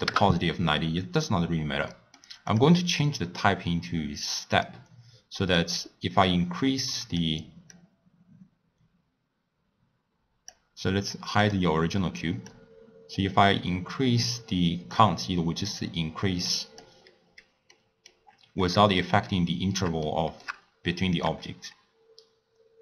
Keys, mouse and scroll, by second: 1.9-2.4 middle drag, 2.4-5.5 drag, 5.6-10.7 drag, 11.4 click, 12.4-17.2 drag, 17.2 scroll down 2, 17.7 middle click, 18.2-19.0 scroll up 11, 19.0-21.2 middle drag, 21.2-22.8 drag.